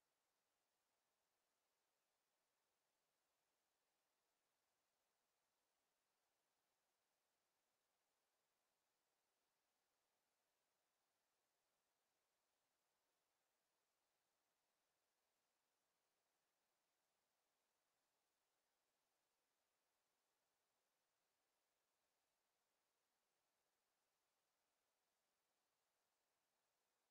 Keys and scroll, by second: 0.3 Escape, 7.9 w, 13.9 e.